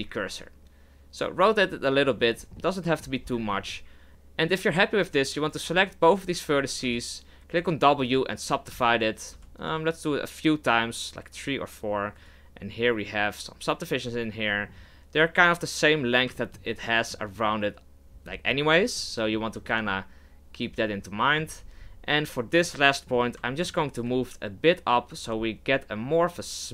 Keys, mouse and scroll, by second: 2.5-3.0 middle drag, 3.0-3.4 scroll down 4, 3.4-4.1 shift+middle drag, 4.1 shift+right click, 5.4 right click, 6.2 shift+right click, 6.8 w, 8.7 w, 9.4 w, 12.2 right click, 14.1-16.2 middle drag, 16.2 scroll down 1, 16.3 scroll up 1, 16.4-21.6 shift+middle drag, 21.6-22.2 scroll up 5, 22.2 right click, 22.6-24.0 middle drag, 24.0 g.